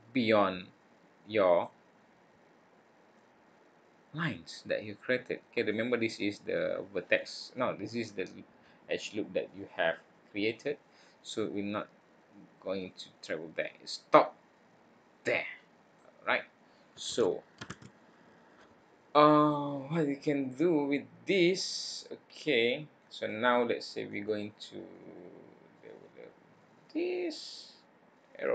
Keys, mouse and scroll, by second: 1.8-3.1 scroll up 5, 3.1 click, 11.4 click, 15.5 click, 17.1 ctrl+z, 17.7 ctrl+z, 18.1-19.5 scroll down 6, 19.5 middle click.